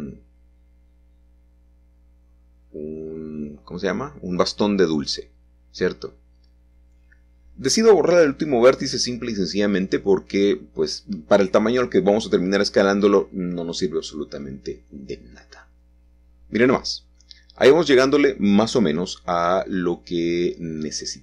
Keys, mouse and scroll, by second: 0.1-1.1 shift+middle drag, 0.6-1.1 scroll up 2, 1.1 Tab, 1.6 shift+middle click, 2.6 middle click, 2.8 shift+click, 3.1-3.5 scroll down 1, 4.2 x, 4.9 middle click, 5.1 click, 6.0-7.2 shift+middle drag, 7.7 shift+s, 10.7 click, 11.5 3, 12.9 g, 14.8 click, 19.5-20.7 scroll up 2.